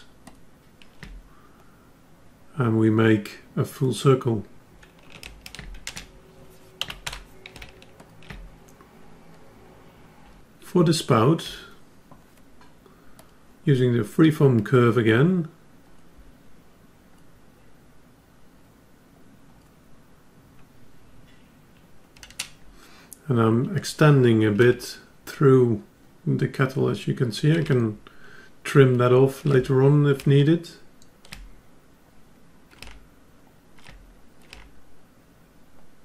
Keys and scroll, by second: 6.0 ctrl+z, 25.0 F10.